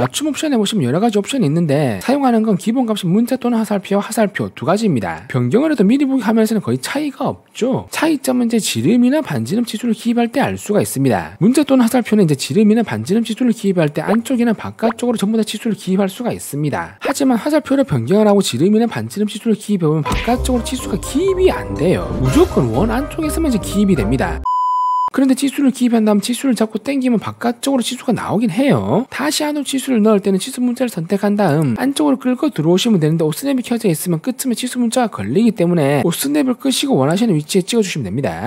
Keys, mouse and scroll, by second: 4.2 click, 11.4 w, 11.6 right click, 12.3 click, 13.1 click, 13.5 right click, 13.9 click, 14.9 click, 18.0 click, 19.1 click, 19.6 click, 25.3 click, 26.0 click, 27.1 click, 30.3 click, 31.7 click, 35.4 click.